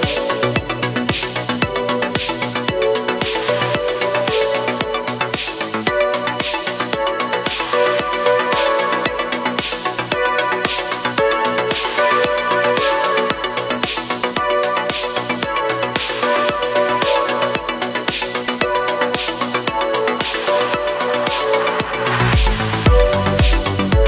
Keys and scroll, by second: 0.1 scroll, 0.3 space, 0.9 space, 1.2 scroll, 1.9 space, 2.5 space, 3.7 ctrl+z, 4.5 ctrl+z, 4.7 ctrl+z, 9.5 ctrl+z, 9.9 ctrl+z, 10.2 ctrl+z, 14.3 ctrl+z, 15.3 ctrl+z, 15.9 ctrl+z, 16.6 ctrl+z, 19.1 ctrl+z, 21.7 ctrl+z, 22.5 ctrl+z, 23.8 space.